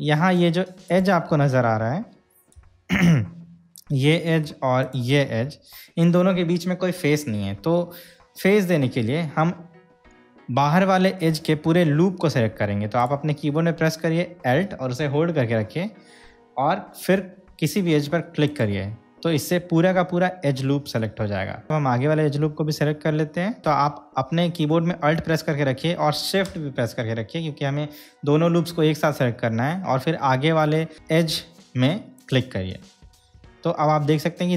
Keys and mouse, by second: 1.1 click, 2.8 KP_Decimal, 5.0 click, 18.8 alt+click, 34.3-34.5 middle drag.